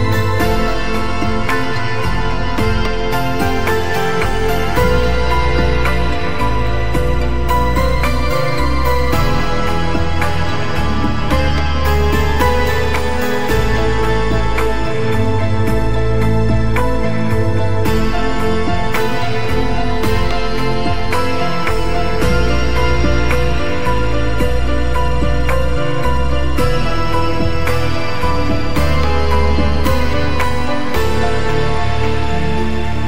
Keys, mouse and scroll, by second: 0.7 click, 3.6 click, 6.5 click, 6.8 click, 8.2-10.8 typing, 9.0 ctrl+click, 10.9-13.1 drag.